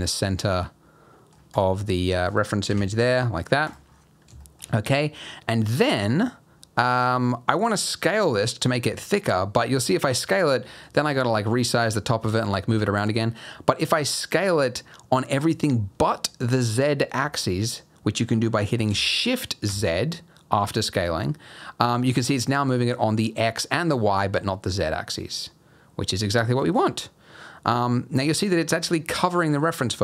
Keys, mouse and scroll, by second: 1.5 click, 1.8 middle click, 2.7 KP_1, 3.1-3.6 scroll up 6, 3.6 click, 3.9-4.4 scroll down 4, 4.4 shift+middle click, 5.8-6.5 scroll up 1, 9.6 s, 12.2 g, 13.8 s.